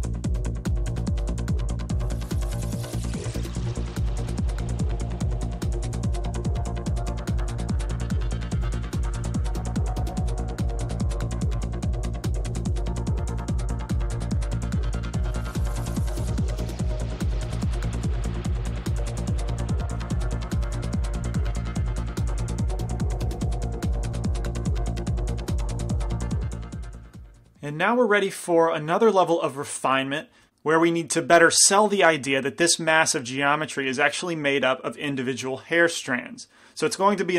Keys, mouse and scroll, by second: 0.0 f, 0.2-7.7 drag, 2.2-3.7 middle drag, 3.7 g, 4.0 f, 4.6-5.9 middle drag, 5.5 f, 5.9 f, 7.4-12.0 typing, 7.6 middle click, 7.9-12.1 drag, 9.9 middle click, 10.5 middle click, 12.1 middle click, 12.8 click, 12.8 right click, 13.2 right click, 13.5 middle click, 13.8 f, 14.0 f, 14.2-16.9 drag, 16.9 g, 16.9 f, 17.2-19.3 drag, 19.7 f, 20.0 middle click, 20.4 f, 20.6 f, 20.9 f, 21.1-23.1 drag, 22.2 middle click, 22.4 f, 23.6 click, 23.9 middle click, 24.3 f, 25.6 click, 25.6 i, 27.0 middle click, 27.9-30.5 middle drag.